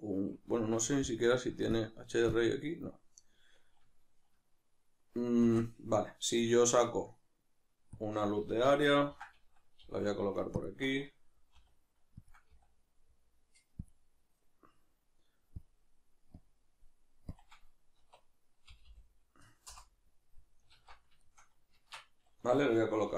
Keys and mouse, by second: 5.4 shift+a, 9.0-11.5 ctrl+middle drag, 9.9 g, 11.5 r, 12.3 click, 18.9-21.2 drag, 18.9 0, 21.2-23.1 shift+middle drag, 21.7 shift+Tab.